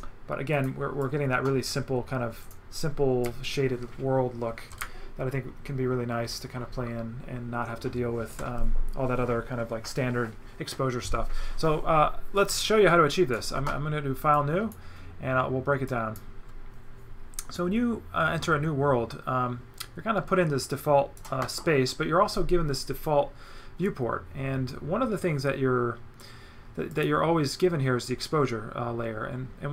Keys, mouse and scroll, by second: 0.5 click, 2.4 click, 3.2 right click, 12.4 right click, 14.3 click, 15.9 click, 17.6 right click, 26.9 click.